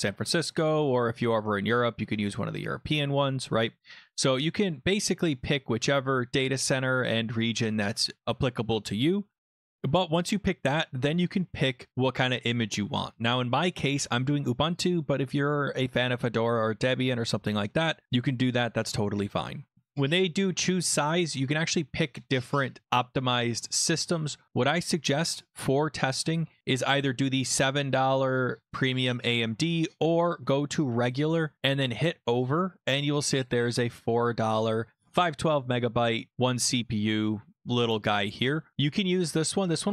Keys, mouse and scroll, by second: 4.7 click, 6.2 click, 8.1 right click, 8.8 click, 9.8-10.5 scroll down 7, 19.4 scroll, 26.8 click, 30.2 click, 31.6 click, 33.4 click.